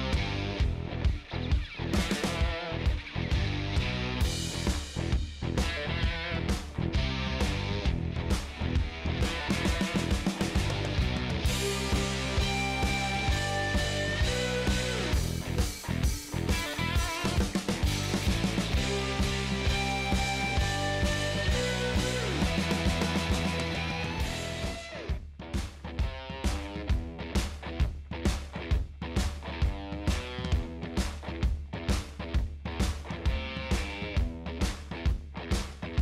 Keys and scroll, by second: 9.8 super+v, 17.7-18.6 typing, 18.9 Return, 28.0 ctrl+space, 29.0-30.1 typing, 30.1 Down, 30.8 Return, 34.5-35.8 typing.